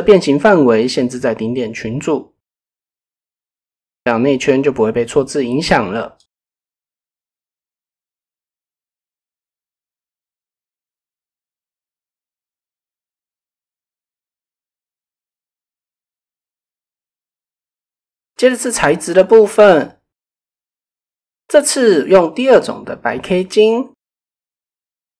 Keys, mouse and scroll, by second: 1.6 Tab, 2.9 click, 3.3-3.8 middle drag, 4.3 middle click, 5.0 KP_7, 5.7 shift+middle click, 6.4 shift+middle click, 7.1 click, 8.0 click, 10.7 click, 11.0 middle click, 11.4 middle click, 12.5 middle click, 13.6 shift+middle click, 16.2 KP_0, 18.1 middle click, 19.2 middle click, 20.6 click, 22.9 click.